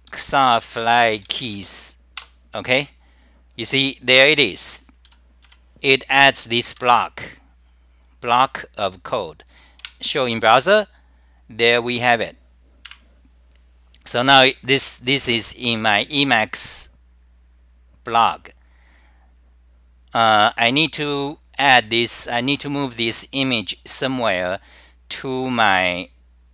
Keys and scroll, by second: 3.4 typing, 5.2-6.1 typing.